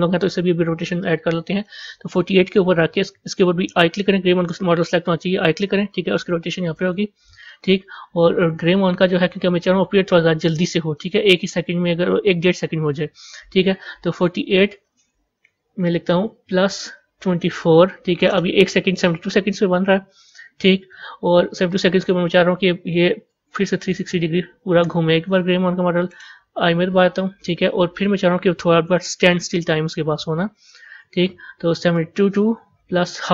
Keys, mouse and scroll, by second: 5.5 i, 14.4-17.5 drag, 21.6-24.7 drag, 26.5 i, 31.8-33.3 drag.